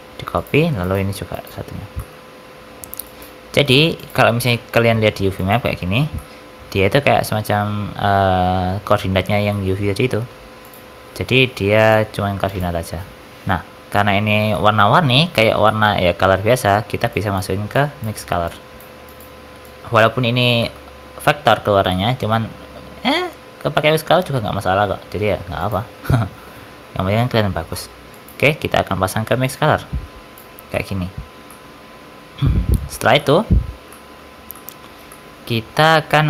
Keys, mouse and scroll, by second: 0.7 click, 1.7 scroll down 5, 1.8 middle click, 2.3 scroll down 2, 2.9 shift+click, 3.9 click, 5.3 ctrl+shift+click, 6.0 middle click, 9.4 middle click, 10.6 ctrl+shift+click, 12.4 ctrl+shift+click, 13.8 middle click, 14.1-14.5 scroll up 2, 14.4 shift+middle click, 14.9-15.3 scroll down 5, 15.3 shift+middle click, 15.5 middle click, 15.7 scroll up 2, 17.0 click, 17.0 scroll up 1, 17.6 shift+click, 18.3 click, 18.9 click, 19.5 shift+click, 20.0 click, 20.2-21.8 scroll up 7, 20.5 middle click, 21.8 middle click, 22.3 shift+a, 29.3 click, 30.6 middle click, 31.1 scroll down 5, 31.4 middle click, 31.6-32.4 scroll up 5, 32.6 click, 33.1 middle click, 33.4-33.8 scroll down 3, 33.8 middle click, 34.4 middle click, 35.0 middle click.